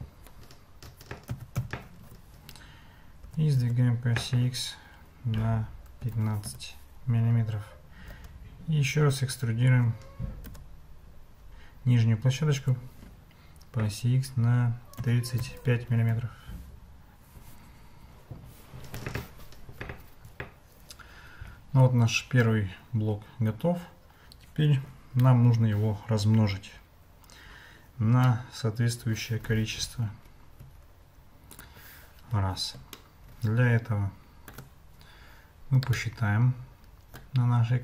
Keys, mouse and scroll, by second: 3.3 g, 8.1 e, 17.1 e, 19.7 Tab, 28.3-29.5 middle drag, 30.0 Escape, 30.6 `, 33.0-34.5 shift+middle drag, 36.0-37.3 shift+drag.